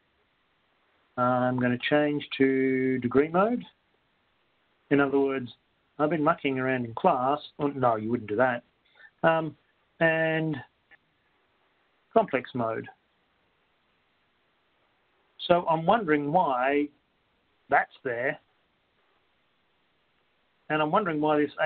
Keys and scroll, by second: 0.5 Return, 0.5 Right, 4.2 Down, 4.2 Right, 4.2 Up, 4.7 Return, 4.7 Down, 6.7 Down, 6.7 Return, 6.7 Right, 6.7 Up, 7.2 Right, 8.4 Down, 9.2 Return, 10.2 Down, 12.7 Return, 12.7 Right.